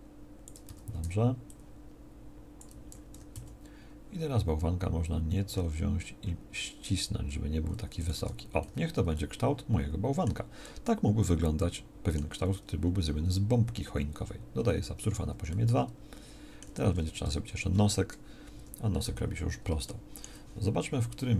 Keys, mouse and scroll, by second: 0.6 a, 1.0 b, 3.1 g, 8.2 Tab, 14.6 ctrl+2, 17.2 Tab, 18.5 KP_1.